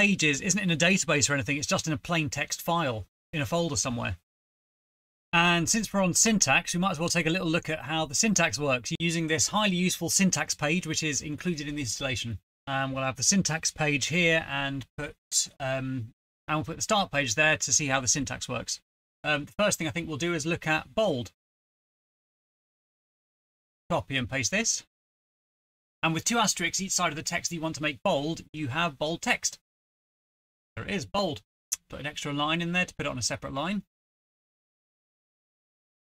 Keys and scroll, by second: 11.8 alt+d, 11.9 alt+Return, 12.3 super+Left, 14.6 super+Right, 15.9 Return, 17.6 BackSpace, 23.8 shift+End, 24.1 ctrl+c, 24.2 Right, 24.5 Return, 24.5 ctrl+v, 27.4 typing, 28.0 End, 28.2 End, 28.2 End, 31.6 Return.